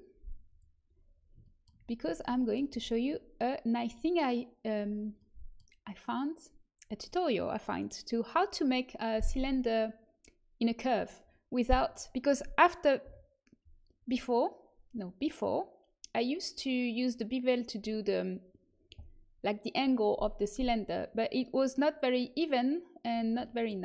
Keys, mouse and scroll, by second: 0.4-2.6 drag, 2.6 z, 5.1 middle click, 13.0 KP_7.